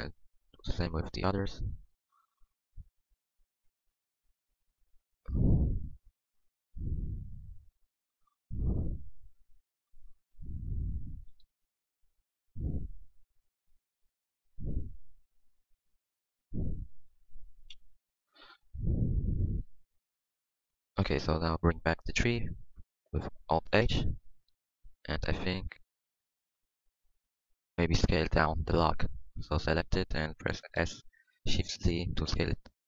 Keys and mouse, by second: 0.4-1.5 drag, 0.5 g, 1.9-4.1 drag, 1.9 g, 3.3 g, 4.8 g, 5.5 Tab, 8.5 Tab, 11.2 g, 12.2 Tab, 13.5 Tab, 14.0 g, 14.5 Tab, 15.2 Tab, 15.8 g, 17.7 x, 18.2 x, 18.8 click, 20.1 g, 20.7 Tab, 22.9 alt+h, 23.8 KP_1, 24.3 a, 27.0 Tab, 28.6 Tab, 30.8 s.